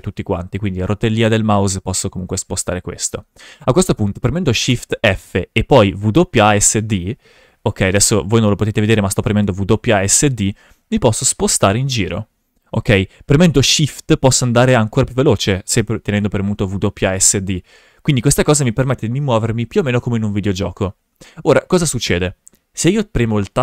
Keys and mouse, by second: 0.9-3.2 middle drag, 4.9 shift+f.